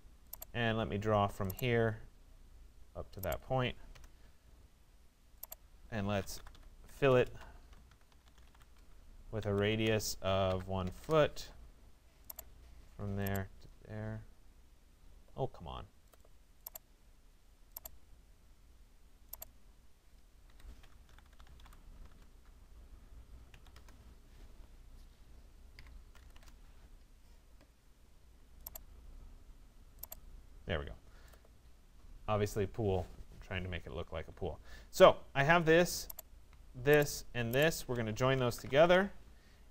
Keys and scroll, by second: 3.5 Return, 6.9 BackSpace, 7.9 i, 8.4 e, 8.6 Return, 10.6 4, 11.0 Return, 20.1 Escape, 22.1 Return, 25.8 6, 26.3 Return, 38.4 Return.